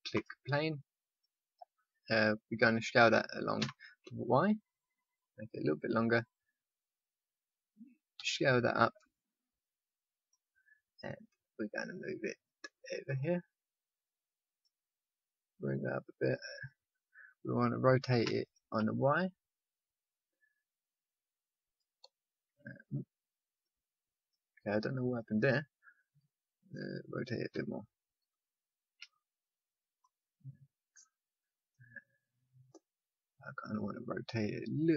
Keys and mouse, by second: 0.2 click, 0.7-2.4 middle drag, 2.7 middle click, 3.5 s, 8.1 s, 10.6 middle click, 11.7 middle click, 12.4-18.2 drag, 18.2 r, 22.5 t, 25.0 click, 27.5 r, 31.7 right click, 32.2-33.4 drag, 33.4 right click, 33.6-34.9 drag.